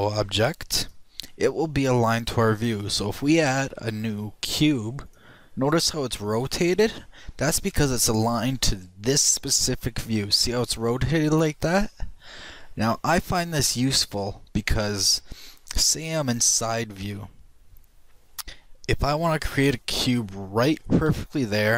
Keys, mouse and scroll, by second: 0.6 click, 6.6 middle click, 7.2 middle click, 7.4-12.0 middle drag, 17.0 KP_3, 20.5 shift+click, 21.6 shift+a.